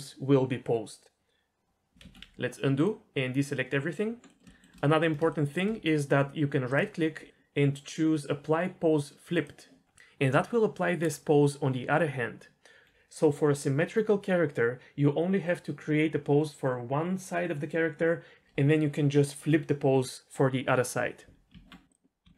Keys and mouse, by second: 2.0 ctrl+z, 4.2 middle click, 4.5 shift+middle click, 5.3 shift+middle drag, 7.7-9.4 drag, 10.1-10.8 middle drag, 11.2 middle drag, 18.4 ctrl+z, 18.4 h, 21.5 Tab, 22.2 h.